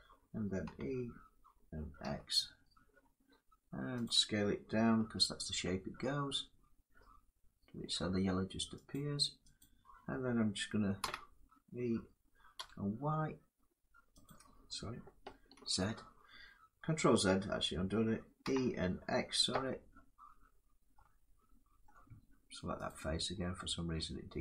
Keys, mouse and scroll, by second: 0.3 e, 1.7 x, 3.3 click, 4.7 s, 8.6 click, 8.6 s, 9.3 click, 10.7 e, 12.2 y, 13.9 click, 15.3 ctrl+z, 18.1 e, 19.2 x, 20.6 x, 20.8 x, 21.2 x, 21.6 middle click, 22.6 click, 23.7 middle click.